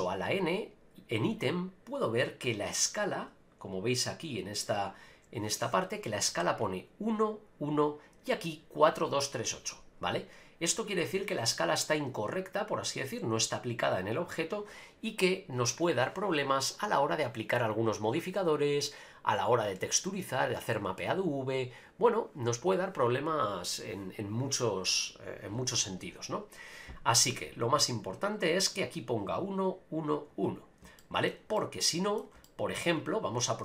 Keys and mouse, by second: 0.0 n, 0.5 click, 2.4 click, 31.0 middle click, 31.5-32.2 middle drag, 32.4 shift+middle drag.